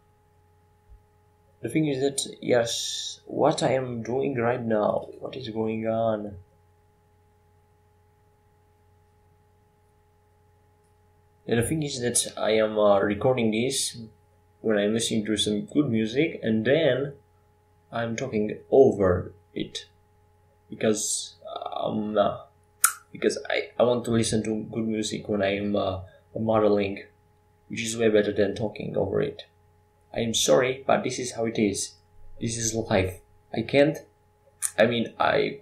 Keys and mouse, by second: 3.6 Tab, 4.9 s, 11.1 KP_5, 12.8 s, 20.7 g, 23.3 g, 24.9 g, 29.2 s, 30.8 g, 32.6 g, 34.4 shift+d.